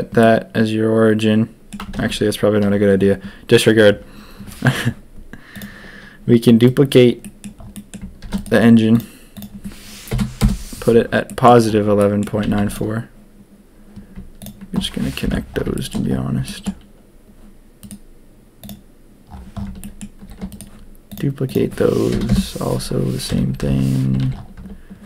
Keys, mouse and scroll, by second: 0.2-1.7 drag, 2.0 ctrl+z, 5.5-6.6 drag, 6.6-7.0 right drag, 7.2 middle drag, 7.7 middle click, 8.2 shift+d, 9.0-10.9 drag, 11.2 middle drag, 11.3 typing, 11.9 middle drag, 12.4 a, 12.5 a, 14.3 shift+click, 15.2 ctrl+j, 15.7 shift+middle drag, 16.4 shift+drag, 18.2-18.6 right drag, 19.8 shift+drag, 20.2 shift+d, 21.0-23.2 drag, 23.2 KP_1, 23.5 KP_1, 24.0 a, 24.2 a.